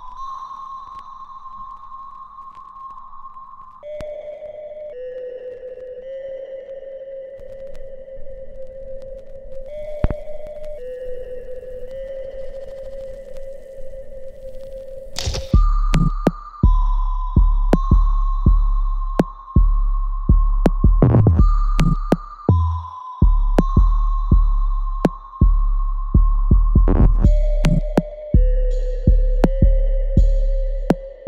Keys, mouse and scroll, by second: 0.4 click, 0.7 alt+click, 1.5 alt+right click, 2.8 click, 7.1 alt+middle click, 7.6 alt+right click, 8.0 alt+click, 8.4 alt+middle click, 9.0 alt+click, 10.2 alt+right click, 10.8 alt+click, 11.1 right click, 12.4 click, 12.7 alt+click, 13.4 right click, 14.4 click, 14.9-17.3 alt+drag, 18.5 alt+middle click, 19.6 click, 19.6-24.5 ctrl+drag, 24.5 alt+click, 25.6 alt+right click, 26.2 right click, 27.2 click, 28.0 alt+click, 30.0 alt+click.